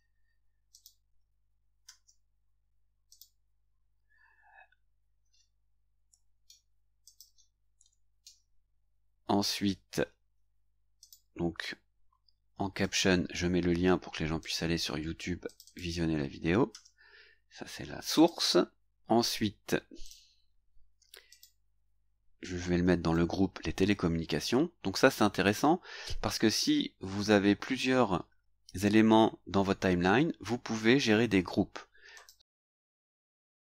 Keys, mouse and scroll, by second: 0.7 click, 1.8 ctrl+v, 3.1 click, 6.0 Delete, 7.0 click, 7.8 Delete, 9.4 click, 11.0 click, 12.5 ctrl+c, 14.4 click, 15.5 click, 16.7 ctrl+v, 18.1 click, 20.0 click, 21.3 click, 22.8 ctrl+c, 32.1 click.